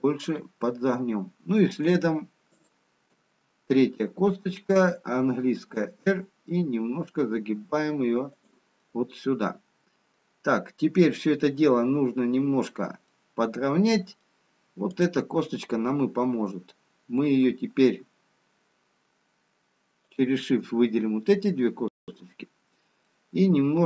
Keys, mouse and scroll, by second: 2.7 shift+click, 5.3 r, 10.1 middle click, 13.3 middle click, 15.3 click, 20.3 shift+click, 23.0 middle click.